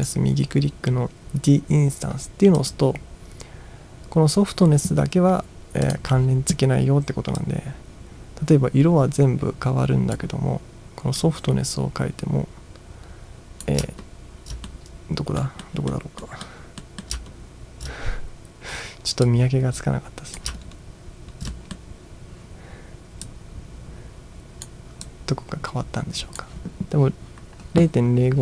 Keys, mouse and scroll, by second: 2.6 click, 5.9 click, 7.4-10.2 drag, 11.2-13.7 drag, 14.0-14.5 ctrl+scroll up 2, 14.7-15.4 middle drag, 15.7-16.0 middle drag, 16.2 middle drag, 16.8 middle drag, 17.4 ctrl+scroll up 1, 19.3-20.4 drag, 20.7-21.5 ctrl+scroll down 3, 21.5 middle click, 23.3-24.7 drag, 25.2-26.4 drag.